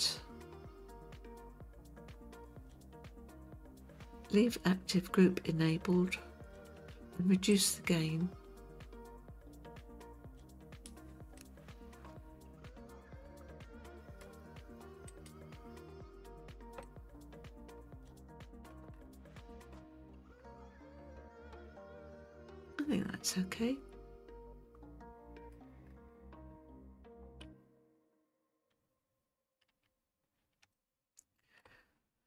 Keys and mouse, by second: 7.6-10.9 drag, 11.4-14.2 middle drag, 15.2 click, 16.8-18.7 middle drag, 19.4-25.5 middle drag, 27.4 KP_3, 29.7 Tab, 30.7-31.6 shift+middle drag.